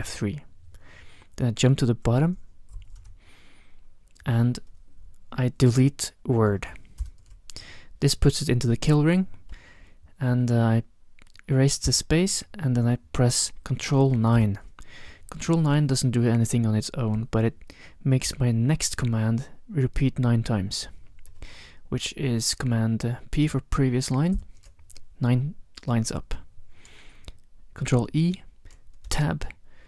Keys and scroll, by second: 0.0 F3, 2.7 shift+super+<, 7.0 ctrl+BackSpace, 11.9 BackSpace, 14.4 ctrl+9, 24.3 ctrl+p, 27.9 ctrl+e, 29.1 Tab.